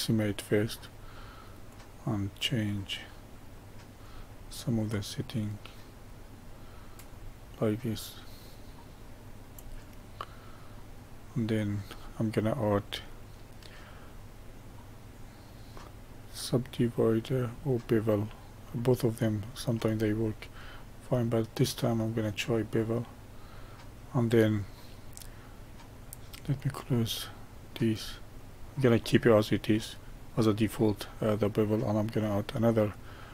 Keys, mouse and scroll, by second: 1.6-4.6 drag, 4.8-7.8 middle drag, 7.9-10.0 drag, 10.0-12.7 middle drag, 12.7-15.9 drag, 20.6-23.8 middle drag, 26.5-29.0 drag, 29.0-32.1 middle drag, 32.1-33.3 drag.